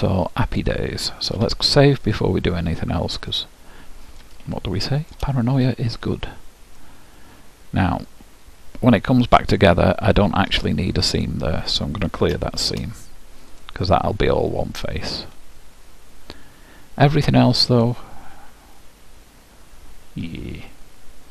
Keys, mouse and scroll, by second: 1.4 ctrl+w, 2.6 scroll up 1, 3.3-6.4 middle drag, 6.8-8.7 middle drag, 11.1-12.9 drag, 12.7 shift+`, 13.5-15.4 drag, 14.0-15.7 middle drag.